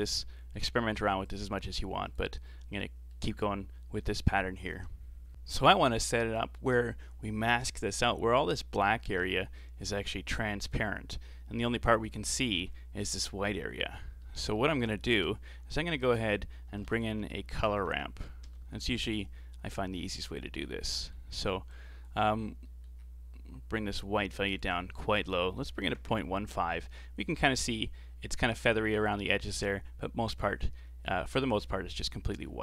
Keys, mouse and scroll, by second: 0.3-1.3 middle drag, 1.3 click, 2.5-2.8 scroll down 2, 2.8-5.3 middle drag, 13.9 scroll down 3, 14.2-15.8 middle drag, 15.8 shift+a, 17.7 BackSpace, 17.9 BackSpace, 18.8 r, 20.7 scroll up 4, 20.9-21.7 middle drag, 21.7 click, 22.3-22.7 scroll up 3, 22.7 middle click, 23.1-23.9 scroll up 2, 23.9-27.5 drag, 28.1 scroll up 5, 30.5-31.8 scroll down 7, 31.8-32.5 scroll down 2, 32.5 scroll down 1.